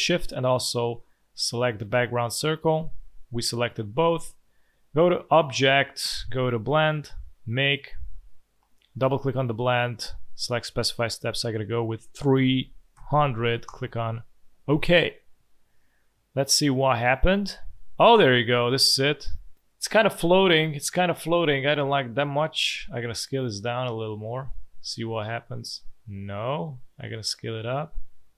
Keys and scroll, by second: 3.2 space, 12.1 3, 12.7 0, 12.9 0, 13.4 Return, 17.5 space, 18.6 z, 19.7 space, 20.2 alt+space, 20.9 v.